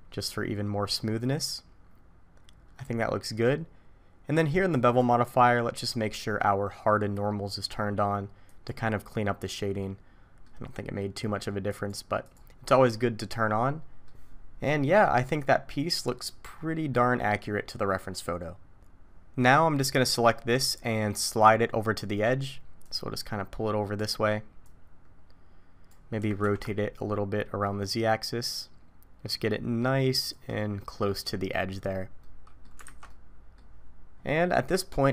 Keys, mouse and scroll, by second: 0.9 middle click, 4.7 click, 8.5 click, 9.8 middle click, 11.7 click, 12.2 click, 13.3 middle click, 14.3-14.8 scroll down 1, 14.8 middle click, 14.8 scroll down 1, 16.5-17.4 scroll up 2, 16.9 middle click, 22.8 click, 24.6 click, 26.2 r, 30.6 middle click, 32.2 middle click, 32.8 alt+a, 33.1 middle click, 34.1-34.9 scroll down 3, 34.9-35.1 scroll up 4.